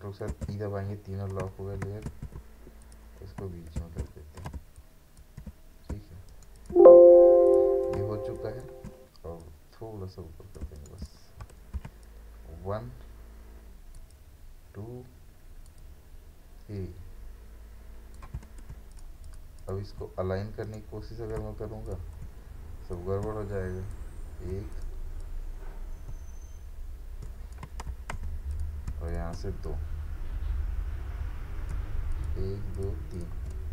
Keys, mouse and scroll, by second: 0.3 ctrl+e, 2.1 ctrl+a, 2.8 click, 3.8 ctrl+d, 4.6 ctrl+space, 4.8 ctrl+click, 5.2 ctrl+space, 5.9 space, 6.3 right click, 6.5 click, 6.6 space, 7.5 click, 8.0 space, 8.4 ctrl+click, 8.6 ctrl+space, 9.4 click, 10.6 space, 10.8 right click, 11.0 click, 12.0-18.9 ctrl+alt+shift+drag, 20.6 right click, 21.6-27.9 shift+drag, 27.9 ctrl+z, 28.5 click, 28.5-32.1 drag.